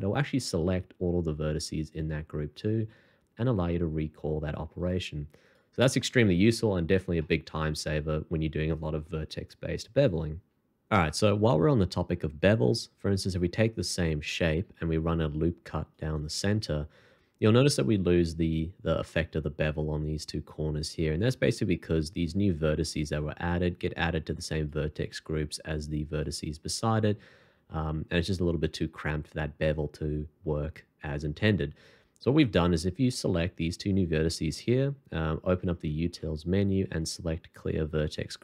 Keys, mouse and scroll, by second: 6.7 Escape, 7.2 middle click, 14.6 ctrl+r, 16.3 double click, 20.5 1, 35.6 alt+t.